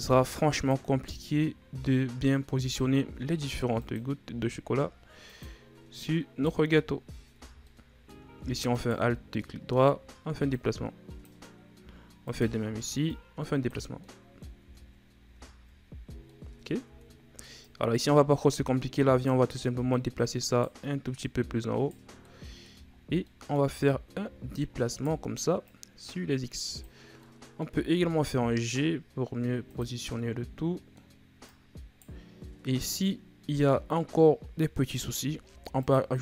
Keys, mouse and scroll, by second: 1.1-2.7 shift+scroll down 2, 2.7 e, 4.2 s, 6.0 right click, 6.6 z, 7.3 z, 7.6-8.7 middle drag, 8.7 alt+right click, 9.1 ctrl+scroll down 4, 9.4-10.5 middle drag, 10.5-12.2 drag, 12.2 alt+right click, 13.1 click, 14.0 middle click, 14.6 Tab, 14.9-15.4 scroll down 3, 15.4-16.3 ctrl+scroll up 2, 16.3 middle click, 16.8 Tab, 17.6 right click, 19.9 right click, 21.1 right click, 22.2 middle click, 22.9 ctrl+scroll down 3, 23.2 middle click, 23.9-24.9 shift+scroll up 6, 24.9 right click, 25.6-27.2 drag, 27.2 middle click, 27.9 g, 30.2-31.4 middle drag, 31.4 right click, 32.5 scroll down 2, 32.7-34.5 middle drag, 34.5-35.4 scroll up 2, 35.4 ctrl+r.